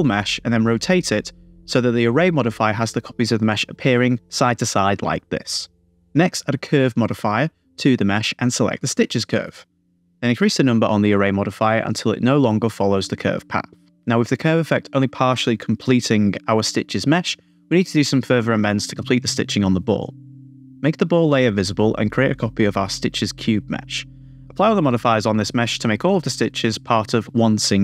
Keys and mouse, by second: 1.4 click, 2.4 click, 3.7 Tab, 4.9 Tab, 6.7-8.5 drag, 9.1 click, 10.8 middle click, 11.4-13.8 drag, 14.4-15.7 middle drag, 16.1 Tab, 16.7 Tab, 17.8-18.9 middle drag, 21.3 click, 22.6 middle click, 22.9 shift+d, 23.2-24.5 drag, 24.9 click, 25.7 click, 26.8 click.